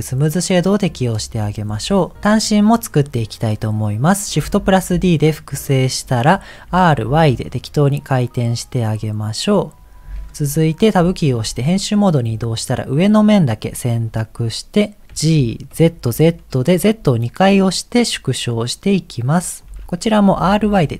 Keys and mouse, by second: 4.7 shift+d, 6.6 r, 11.0 Tab, 12.8 click, 15.2 g, 20.4 r.